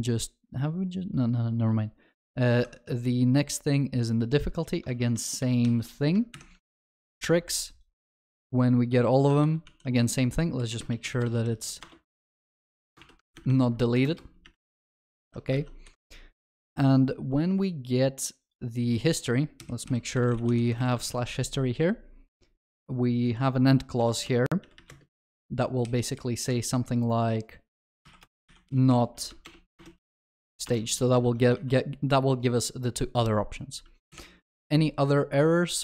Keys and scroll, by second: 2.6 alt+shift+F2, 4.9 ctrl+w, 5.4 ctrl+v, 5.7 ctrl+s, 6.4 alt+shift+F2, 8.1 ctrl+w, 9.4 ctrl+v, 9.8 ctrl+s, 11.9 Return, 21.1 ctrl+s, 29.4 Delete, 29.4 ctrl+BackSpace, 31.2 Return, 31.2 ctrl+alt+shift+l, 34.1 alt+shift+F2.